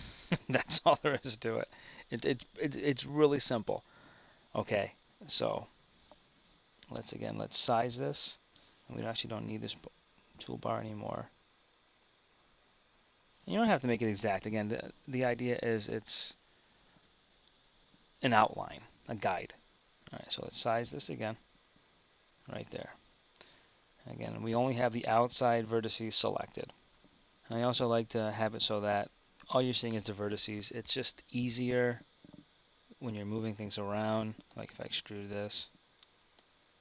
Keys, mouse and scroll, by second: 6.2 KP_1, 9.3 t, 13.6 KP_1, 20.3 s, 23.0 Tab, 24.1-26.2 middle drag, 26.8 KP_1, 28.2 Tab, 29.2 KP_1, 34.3 e.